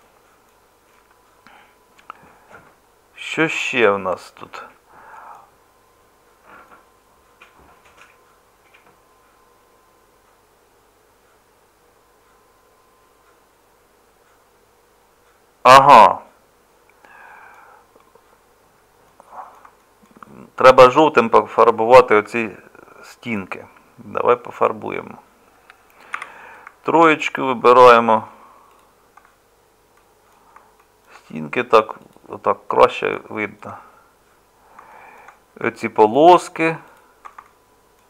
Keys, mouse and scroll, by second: 1.5-19.6 middle drag, 22.3 Tab, 26.1 3.